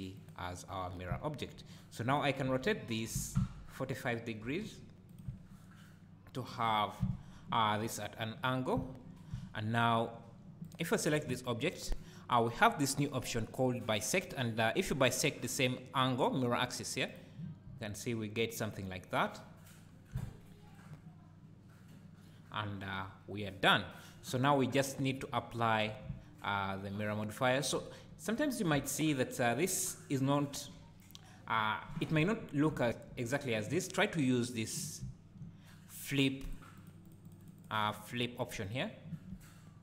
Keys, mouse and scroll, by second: 1.1 `, 2.1 click, 2.5 `, 3.1 r, 5.2 click, 5.4 `, 6.7 scroll down 1, 7.0 `, 7.8-8.7 scroll up 1, 8.7 `, 10.6 click, 17.1 click, 19.9 scroll down 1, 26.0 `, 34.5 click, 35.0 `, 36.5 click, 36.8 click, 37.1 click, 37.3 click, 37.4 click, 37.6 click, 37.8 click, 37.9 click, 38.1 click, 38.7 click, 39.3 `.